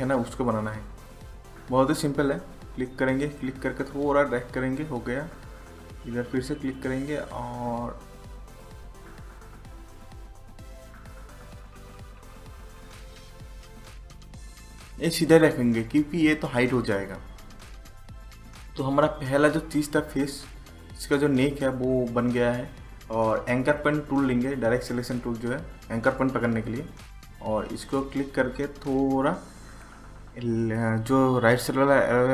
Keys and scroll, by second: 32.0 Right.